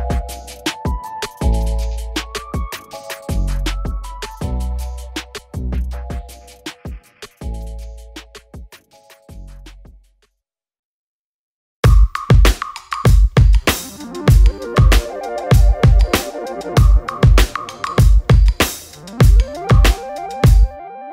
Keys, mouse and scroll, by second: 0.1 KP_7, 0.2 KP_7, 0.7 g, 1.6 s, 2.7 middle click, 3.1 click, 3.5 scroll down 1, 3.7 middle click, 4.0 click, 4.4 click, 4.9 5, 5.7-6.9 drag, 6.9 scroll down 1, 7.1 middle click, 7.2-7.6 scroll up 3, 7.3 shift+middle click, 7.6 shift+middle click, 8.6 click, 8.9 alt+d, 9.6 r, 10.9 click, 11.6 z, 11.7 scroll down 1, 11.8 scroll up 1, 11.9 alt+a, 13.2 click, 14.1 click, 15.0 click, 16.0-17.0 drag, 18.4 click, 18.8 alt+d, 19.6 click, 20.7 click.